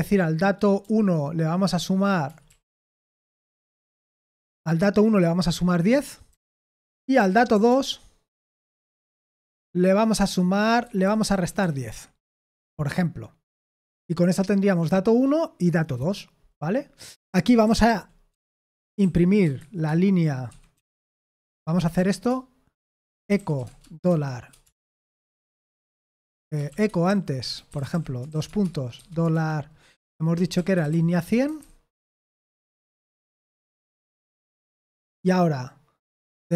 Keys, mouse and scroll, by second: 0.8-3.9 typing, 6.3-12.5 typing, 16.8-32.0 typing, 33.8 Escape, 34.3 o, 36.4-36.5 typing.